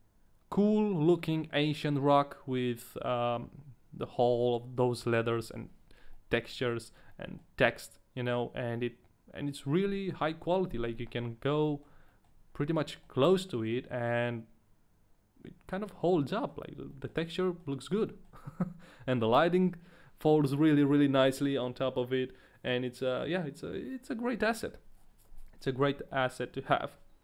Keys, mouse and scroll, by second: 1.6 middle click, 5.5-6.1 scroll up 2, 6.1 middle click, 7.4 shift+middle click, 7.4-8.6 scroll up 2, 8.7 middle click, 11.2 shift+middle click, 11.4 scroll up 1, 11.6 middle click, 12.3 shift+middle click, 12.3-12.7 scroll up 2, 13.0 shift+middle click, 13.0 scroll up 2, 13.4 middle click, 15.4 scroll down 1, 16.0 middle click, 16.0 scroll down 1, 16.1 middle click, 16.5 scroll down 2, 17.2 shift+middle click, 17.4 middle click, 17.6 scroll down 1, 18.3 shift+middle click.